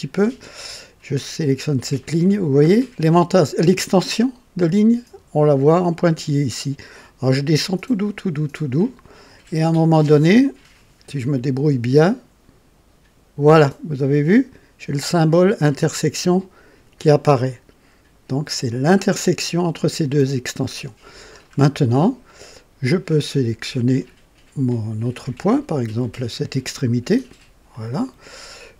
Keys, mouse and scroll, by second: 18.5 click, 21.3-21.9 scroll down 3, 22.3 right click, 27.7 click.